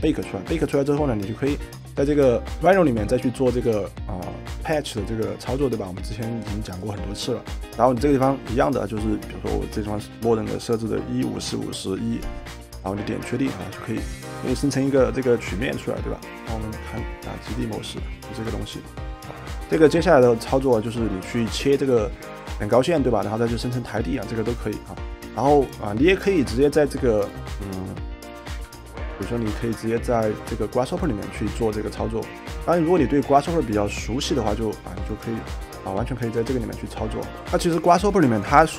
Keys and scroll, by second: 7.4-8.2 typing, 28.6 Delete.